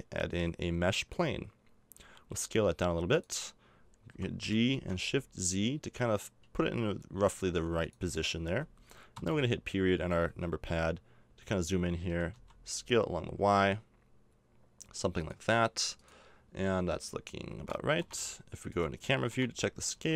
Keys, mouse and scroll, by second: 2.0 s, 4.1 g, 8.3-10.3 middle drag, 9.1 KP_Decimal, 10.3 z, 11.0 click, 12.1 s, 18.7 click, 19.3 KP_0, 19.9 z.